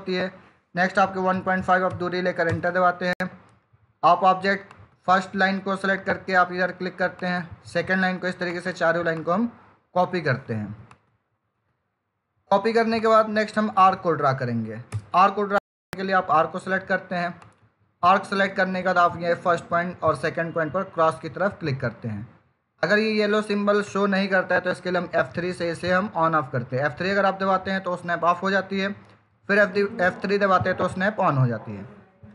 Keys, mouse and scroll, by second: 2.4 Return, 4.5 click, 14.8 Return, 17.3 click, 26.2 F3, 30.1 F3.